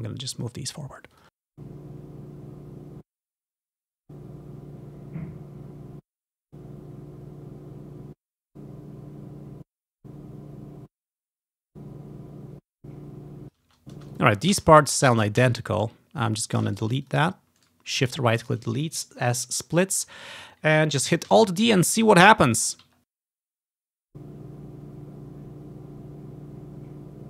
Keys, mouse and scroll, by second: 0.1 click, 1.3 click, 1.5 space, 1.9-2.2 ctrl+scroll up 2, 2.2-2.8 ctrl+scroll down 2, 2.9 space, 3.1 click, 3.8-5.2 drag, 4.0 space, 5.9 space, 6.2 click, 6.4 space, 7.2 click, 8.0 space, 8.3-10.1 drag, 8.4 space, 9.6-15.5 typing, 11.2 click, 11.5 click, 11.7-13.9 drag, 14.3 click, 15.2 click, 16.1-16.7 ctrl+scroll down 1, 16.6-19.9 ctrl+shift+drag, 16.9-18.0 ctrl+shift+middle drag, 16.9-18.0 ctrl+shift+right drag, 21.4 alt+d, 22.0 ctrl+click, 22.6 right click, 22.7-23.9 ctrl+drag, 23.1-23.8 ctrl+scroll up 1, 24.0 space.